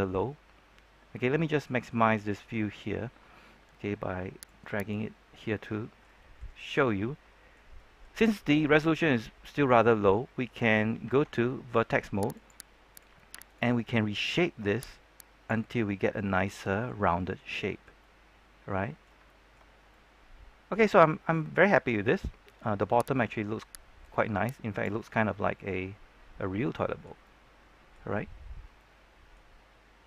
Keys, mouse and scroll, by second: 0.6-2.1 scroll down 1, 4.4 click, 5.4 scroll down 1, 5.6-10.6 middle drag, 11.0 ctrl+Tab, 12.3 click, 12.8 right click, 13.4 shift+right click, 13.7 middle click, 14.8 click, 15.5-19.1 middle drag, 19.2-22.8 shift+middle drag, 23.1 right click, 24.0 click, 24.9-28.0 middle drag, 28.0-28.4 scroll up 1, 28.4-28.7 scroll down 1, 28.7 middle click, 29.5-29.8 scroll up 1, 29.8 scroll down 1.